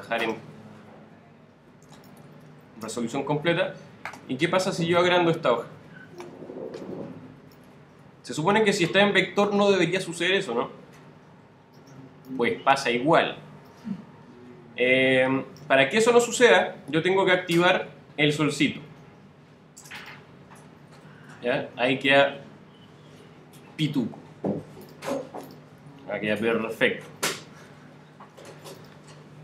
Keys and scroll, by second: 26.3 super+z.